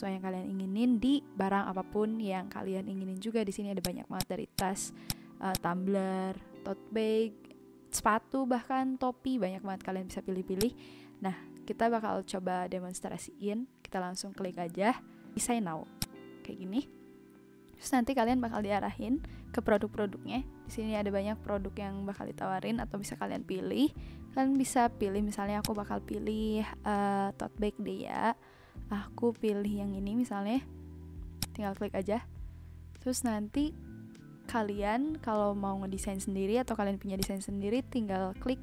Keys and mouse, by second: 3.8 click, 10.5 click, 11.7 click, 15.9 click, 25.6 click, 31.3 click, 37.2 click.